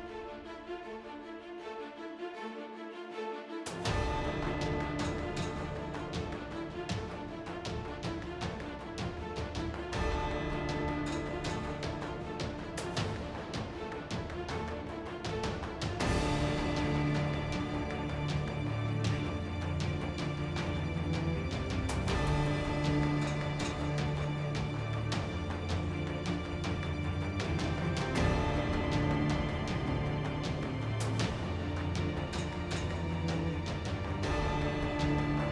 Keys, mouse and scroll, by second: 0.1 Tab, 0.1 z, 1.4 middle click, 1.8 middle click, 2.1 Tab, 2.3 Tab, 3.7 alt+c, 4.2 Tab, 5.0 ctrl+Tab, 5.5 c, 6.1 c, 7.1-8.8 middle drag, 8.8 i, 9.0 Tab, 9.5 Tab, 10.0 Tab, 10.8 Tab, 12.2 ctrl+x, 14.5 ctrl+x, 15.6 ctrl+x, 15.9 Tab, 16.3 Tab, 16.9 x, 17.5 l, 19.6 middle click, 19.7 Tab, 20.6-21.6 typing, 23.2 shift+a, 24.2-27.1 typing, 24.8 Tab, 24.9 Tab, 26.0 Tab, 28.7 g, 31.9 e, 34.5 s, 34.8 a, 34.8 a.